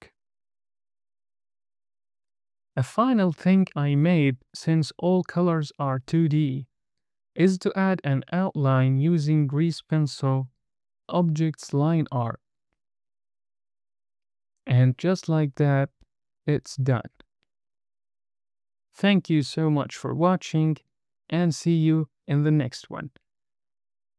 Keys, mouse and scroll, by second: 1.5-2.1 scroll down 3, 3.2 KP_0, 4.4-4.8 scroll down 3, 6.1 shift+middle click, 10.2 click.